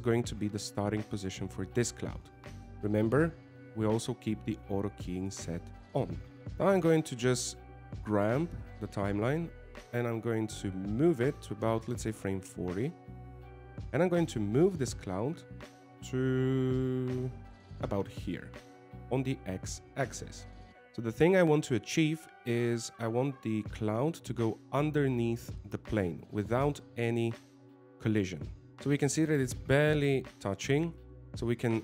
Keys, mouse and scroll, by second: 8.5 click, 15.8 g, 20.2 middle click, 20.7 click.